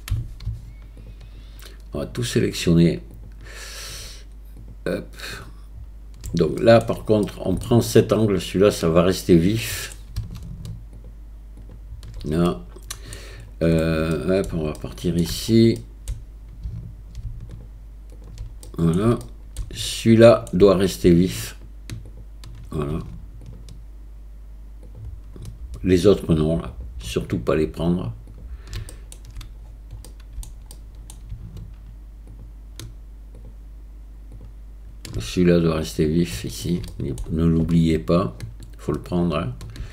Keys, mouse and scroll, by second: 3.1 alt+shift+click, 5.4 alt+shift+click, 6.6 shift+click, 7.3 middle click, 7.6-9.6 shift+drag, 9.6 shift+middle click, 10.9 alt+shift+click, 11.6 alt+shift+click, 12.5 shift+middle click, 14.1 middle click, 14.8 shift+middle click, 15.8 middle click, 18.1 alt+shift+click, 18.7 shift+middle click, 19.2 middle click, 19.9 shift+middle click, 22.2 shift+click, 23.5 alt+shift+click, 26.1 alt+shift+click, 26.7 alt+shift+click, 28.9 shift+click, 30.1 middle click, 30.7 shift+middle click, 32.4-33.5 alt+shift+drag, 34.4 alt+shift+click, 36.3 shift+middle click, 37.0 middle click.